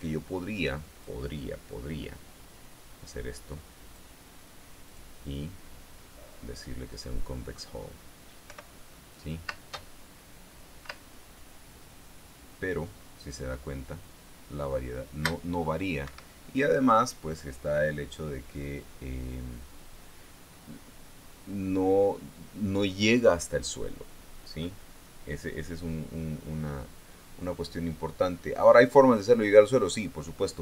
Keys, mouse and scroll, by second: 0.3-1.7 drag, 4.4 click, 5.4 click, 7.4 click, 9.0 p, 10.0 space, 11.4 space, 16.6 Escape.